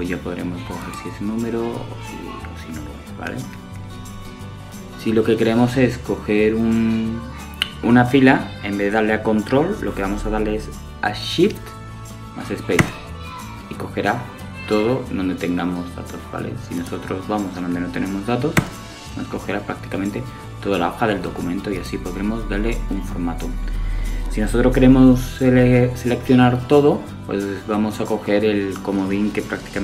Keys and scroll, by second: 9.0 shift+space, 27.5 super+a.